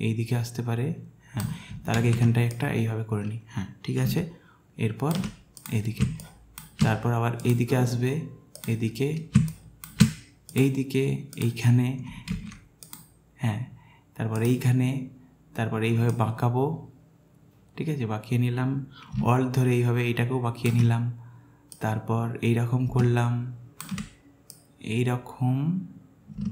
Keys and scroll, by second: 1.9 ctrl+z, 6.0 space, 9.4 space, 12.3 ctrl+z.